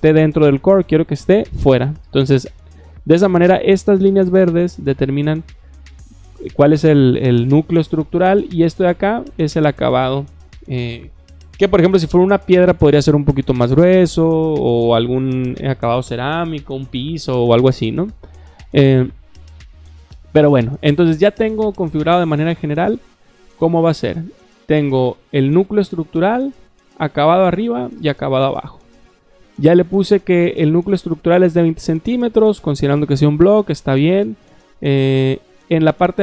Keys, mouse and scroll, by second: 0.9 click, 24.2 click, 25.0 click, 26.7 click, 27.8 click, 30.0 click, 34.5 click.